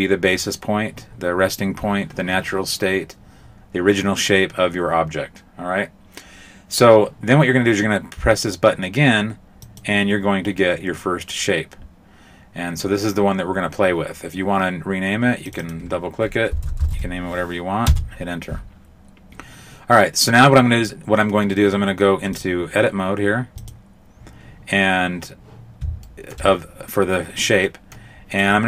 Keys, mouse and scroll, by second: 9.6 click, 15.5 click, 15.6 click, 16.9 h, 22.4 click, 23.7 click, 26.0 shift+middle click, 27.6 middle click, 28.3 right click.